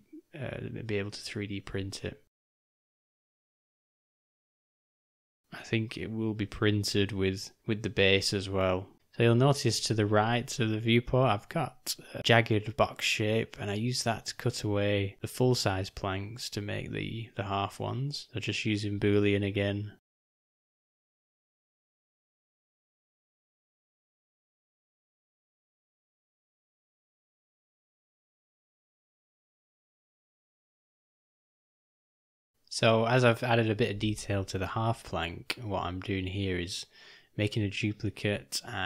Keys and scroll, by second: 21.3 shift+d, 25.1 shift+d, 30.3 F7, 31.3 F6, 35.9 Delete, 37.0 shift+d.